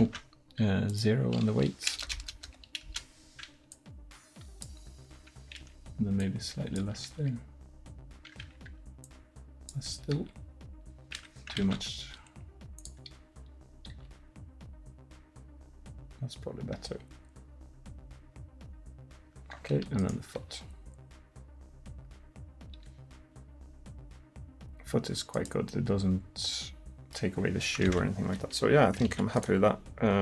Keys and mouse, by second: 0.0 ctrl+z, 2.2 BackSpace, 5.0 r, 7.2 r, 10.2 r, 11.7 ctrl+z, 14.0 r, 20.0-23.4 right drag, 20.5 r, 25.7-26.3 middle drag, 26.8-27.2 middle drag, 27.9 ctrl+z, 29.1 ctrl+s.